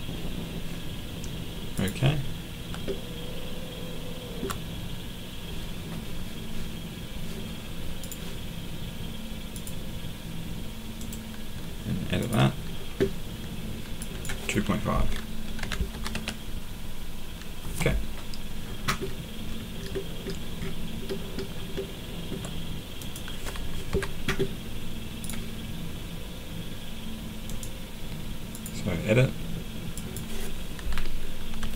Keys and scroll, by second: 15.3-16.6 typing, 17.6 Return, 23.9 Escape, 31.3-31.7 typing.